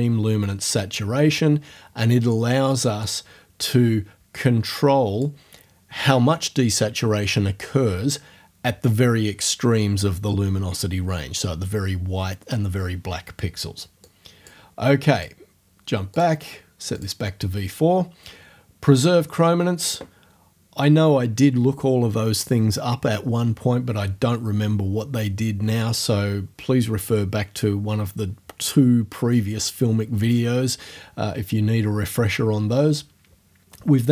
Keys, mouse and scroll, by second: 3.0-5.4 drag, 14.1 click, 15.2 click, 16.1 click, 17.0 click, 19.8 click.